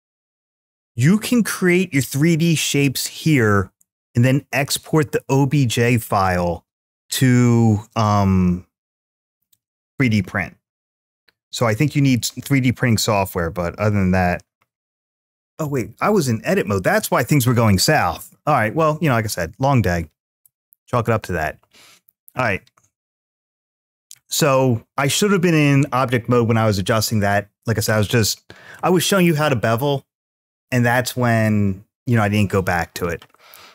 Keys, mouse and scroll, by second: 15.4 Tab, 15.4-16.5 middle drag, 20.2 x, 21.5-22.0 scroll down 1, 22.0 scroll up 1, 23.3-24.6 scroll up 1.